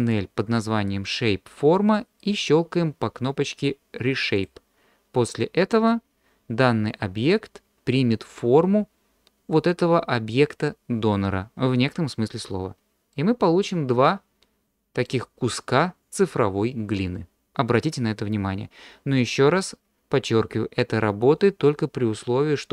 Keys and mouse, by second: 0.0 click, 4.4 click, 13.1-15.1 middle drag.